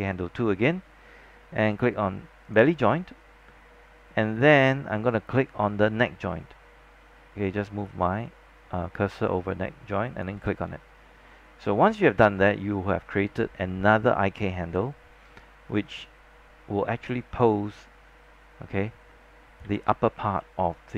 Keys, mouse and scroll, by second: 12.2 scroll down 1, 12.6 alt+middle click, 13.4-15.0 scroll up 1, 15.8-19.7 drag, 19.7 z, 20.2 scroll down 1, 20.5 alt+middle click.